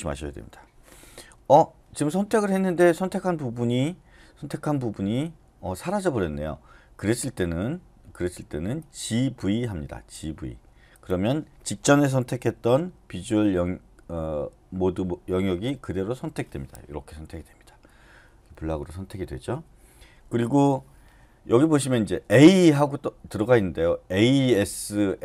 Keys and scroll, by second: 15.6-16.1 typing.